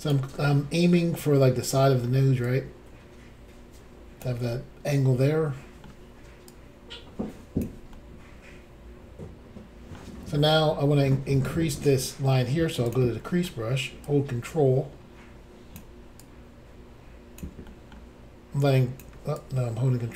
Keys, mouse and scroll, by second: 0.4 middle click, 1.8 middle click, 2.5 click, 4.5 middle click, 6.5 click, 7.9 middle click, 12.9 click, 12.9 click, 13.3 middle click, 14.0 ctrl+click, 16.2 ctrl+click, 17.7 middle click, 18.6 click, 19.1 click, 19.4 ctrl+click.